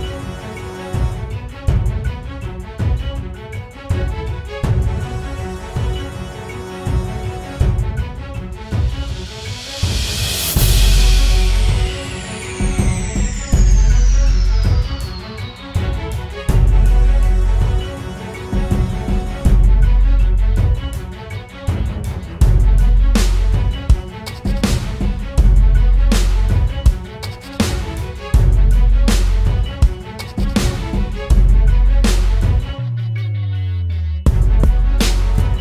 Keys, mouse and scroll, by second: 7.4 ctrl+t, 14.9 Right, 15.5-18.4 Right, 18.7 Right, 19.5 Left, 19.9 Return.